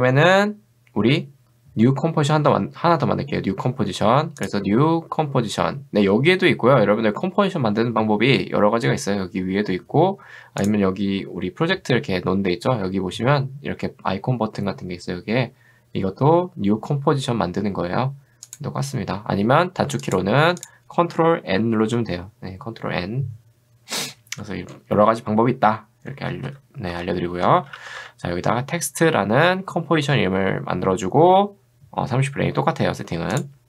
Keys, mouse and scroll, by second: 18.5 click, 20.1 click, 20.6 click, 21.5 ctrl+n, 24.4 d, 25.9-28.5 typing, 33.3 click.